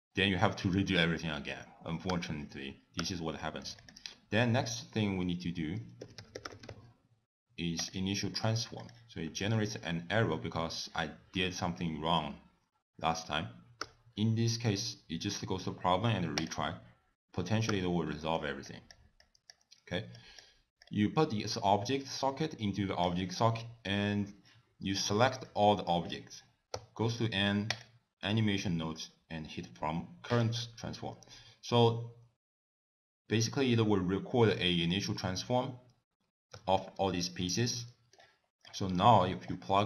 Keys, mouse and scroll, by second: 2.1 t, 3.1 t, 3.5 middle click, 3.9 click, 4.5 ctrl+a, 8.9 click, 10.7 middle click, 13.9 t, 16.5 click, 17.8 t, 18.2 middle click, 18.7 click, 19.3 click, 20.3 click, 21.0 click, 23.7 middle click, 25.1 click, 26.8 n, 27.8 click, 30.4 click, 36.6 n, 37.2 shift+middle click, 37.7 middle click, 38.7 click, 39.1 scroll up 3, 39.4 middle click.